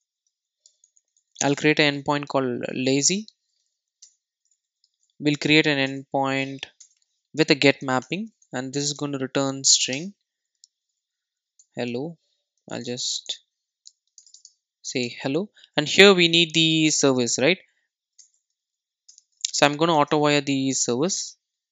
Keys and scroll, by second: 5.9 Return, 20.8 Return.